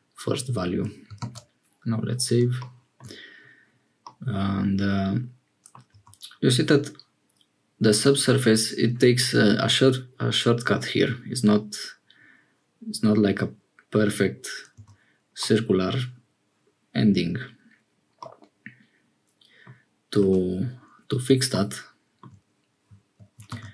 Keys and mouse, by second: 1.2 ctrl+s, 4.0-5.8 middle drag, 5.9 Tab, 14.8 Tab, 15.4 middle click, 18.2-19.7 middle drag, 20.2 Tab, 23.4 ctrl+r.